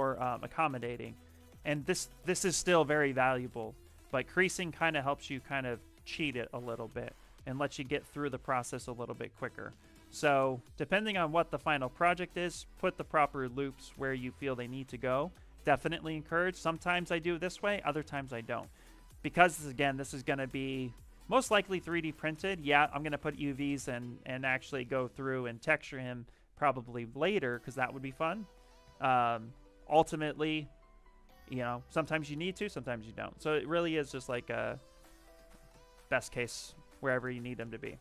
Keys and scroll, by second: 1.4 shift+f, 3.2 shift+d, 4.5 ctrl+z, 9.1 ctrl+z, 10.0 space, 16.5 shift+f, 21.3 s, 26.2 s, 27.7 shift+f, 28.0 shift+f, 28.7 d, 29.7 shift+f, 31.9 s, 34.2-37.1 typing.